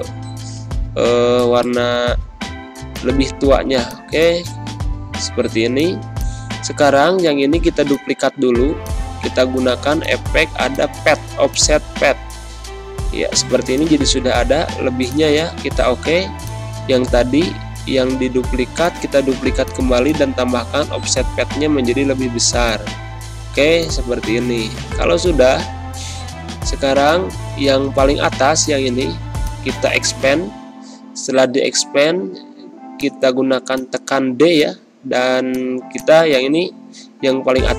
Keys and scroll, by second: 2.1 ctrl+End, 21.5 6, 25.0 d, 26.0 ctrl+z, 31.6 d, 36.9 ctrl+shift+[.